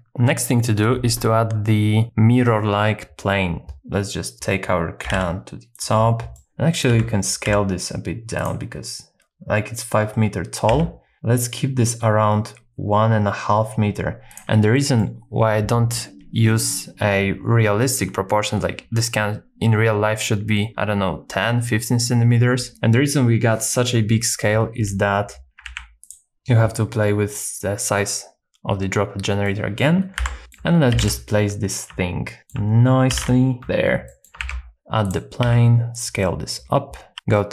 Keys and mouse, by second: 3.7 g, 3.7 z, 5.0 g, 5.1 z, 5.8 shift+click, 6.4 middle click, 6.5 shift+a, 6.9 n, 7.5 n, 8.4 click, 10.7 s, 14.3 shift+click, 14.8 middle click, 25.7 ctrl+a, 29.4 middle click, 30.2 KP_1, 30.4 shift+click, 30.9 g, 32.4 shift+click, 33.1 g, 33.2 z, 34.1 middle click, 34.4 shift+a, 35.4 s, 36.2 middle click, 37.1 g.